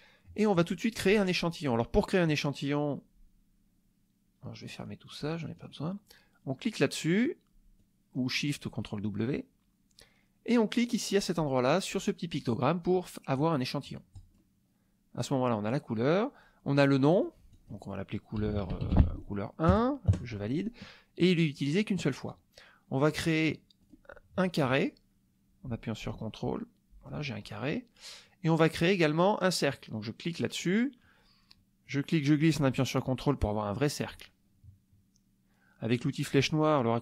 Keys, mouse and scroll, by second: 4.6 click, 5.1 click, 5.3 click, 7.8 click, 14.1 click, 17.0 click, 17.5 click, 18.1-19.7 typing, 20.1 KP_Enter, 23.8 click, 24.8-27.2 drag, 30.4 click, 31.8-34.2 drag.